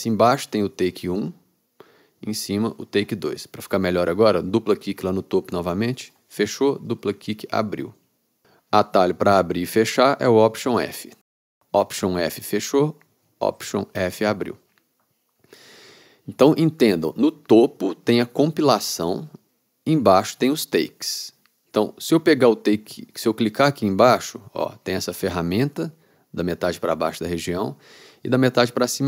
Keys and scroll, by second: 13.4 alt+f.